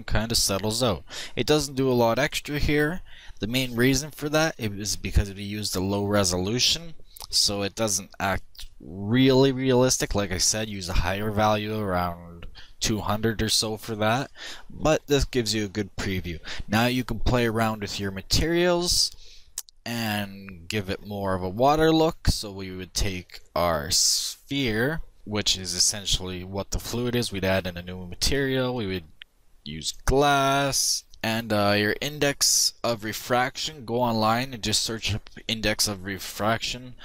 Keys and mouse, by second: 17.1-18.9 drag, 22.4-24.0 drag, 25.8-28.8 drag, 30.0-31.1 drag.